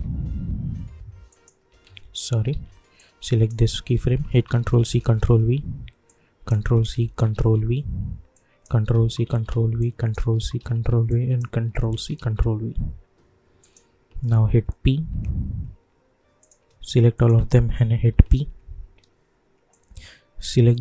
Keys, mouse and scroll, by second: 1.3 click, 1.8 ctrl+z, 2.9 click, 4.2 ctrl+c, 4.8 ctrl+v, 6.0 click, 6.9 ctrl+c, 7.3 ctrl+v, 8.3 click, 8.9 ctrl+c, 9.2 ctrl+v, 9.8 click, 10.3 ctrl+c, 10.5 ctrl+v, 11.1 click, 11.9 ctrl+c, 12.1 ctrl+v, 13.6 click, 14.5 p, 15.1 p, 16.4 click, 17.1 shift+click, 18.0 p, 19.7-20.8 drag.